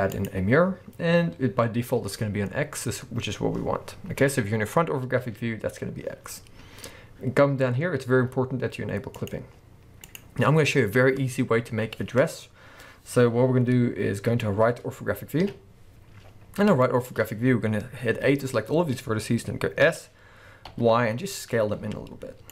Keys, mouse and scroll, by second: 3.8-4.5 scroll down 2, 4.5-8.6 scroll up 2, 9.2 click, 10.6-14.6 scroll up 2, 15.4 KP_3, 16.3-16.8 scroll up 2, 16.8-18.3 shift+middle drag, 18.3-20.9 drag.